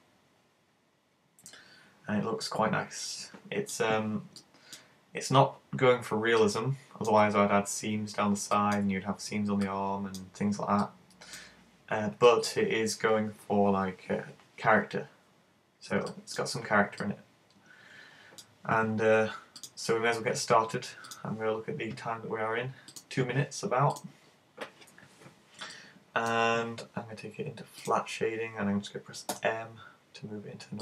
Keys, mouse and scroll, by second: 4.4 middle click, 5.4 scroll up 4, 5.6 scroll down 1, 5.8-6.4 scroll down 4, 6.4 middle click, 8.6 middle click, 9.6 middle click, 16.2 middle click, 17.0 middle click, 19.6 click, 24.0 click, 25.8 middle click, 27.9 click, 29.4 m.